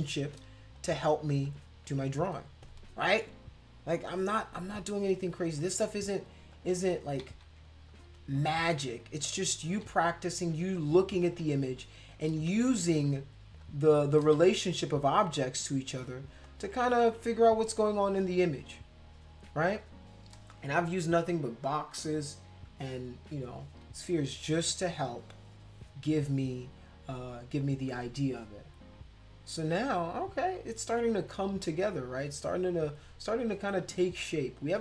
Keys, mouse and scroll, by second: 0.8 click, 1.5 shift+click, 5.6 click, 6.5 shift+click, 7.3 ctrl+z, 7.9 click, 8.7 shift+click, 9.7 ctrl+z, 10.2 click, 11.5 shift+click, 12.5 ctrl+z, 13.0 click, 13.6 shift+click, 14.4 ctrl+z, 14.7 click, 15.2 shift+click, 16.4 shift+click.